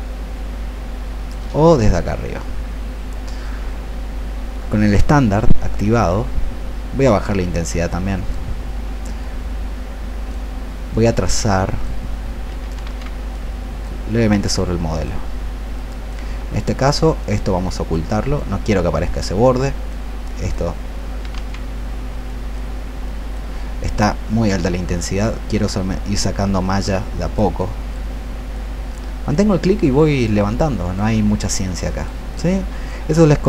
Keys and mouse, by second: 12.9 ctrl+z, 13.2-15.6 drag, 16.6 alt+click, 17.1 alt+click, 17.6 alt+click, 18.2 click, 21.4 ctrl+z, 22.2-33.4 drag.